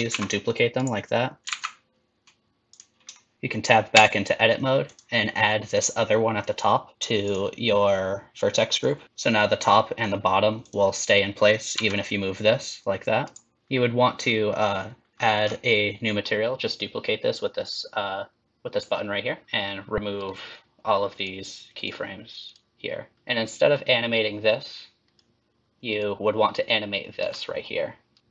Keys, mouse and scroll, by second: 0.2 shift+d, 1.5 g, 3.1 shift+middle click, 3.4 shift+middle click, 4.0 Tab, 4.8 click, 7.2 click, 8.8 click, 9.1 Tab, 9.1 click, 10.6 click, 11.7 g, 13.6 click, 15.1-15.9 scroll down 10, 19.4 click, 20.2 right click, 21.7 right click, 23.1 click, 23.1 shift+middle click, 23.1 scroll down 2, 24.5 click, 25.9 click, 27.3 g, 28.2 Tab, 28.2 shift+middle click, 28.2 scroll down 2.